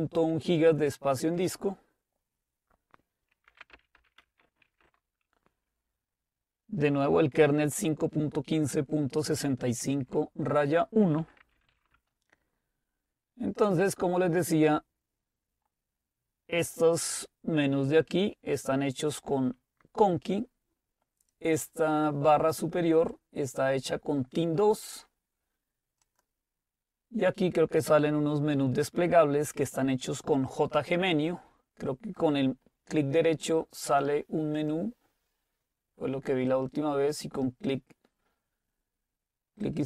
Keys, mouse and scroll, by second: 0.0-1.2 drag, 3.3-5.2 typing, 11.0-12.2 typing, 26.1-27.7 right drag, 33.9-36.0 right drag, 36.9 click, 39.7 click.